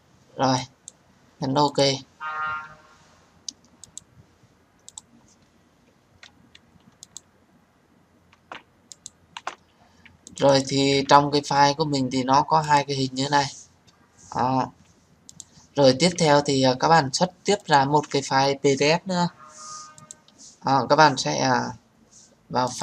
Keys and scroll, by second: 8.2 Delete.